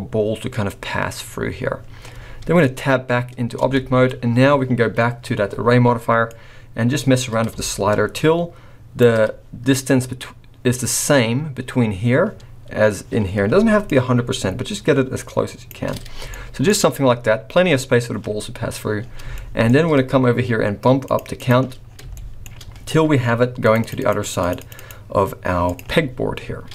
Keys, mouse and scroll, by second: 2.2-2.6 scroll down 4, 3.6 Tab, 3.7-4.2 scroll up 3, 4.4-4.8 scroll down 1, 6.2 click, 9.3 scroll up 3, 13.8 shift+click, 16.1 scroll down 3, 16.3 shift+middle click, 18.9 scroll down 2, 19.3 shift+middle click, 21.0 click, 21.3 click, 21.8-22.1 scroll down 2, 22.1 shift+middle click, 23.6 click, 23.8 click, 23.9 click, 24.2 click, 24.6 click, 24.7 click, 25.7 click.